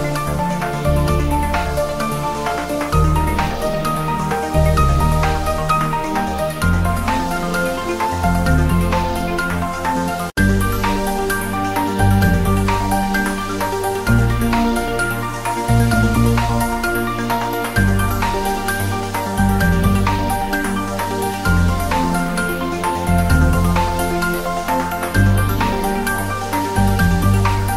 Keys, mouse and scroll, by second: 0.0 g, 0.4 click, 0.9 g, 1.1 click, 1.5 g, 1.8 click, 2.3 g, 2.5 click, 2.7-3.0 scroll up 1, 5.3-6.3 drag, 27.2 click.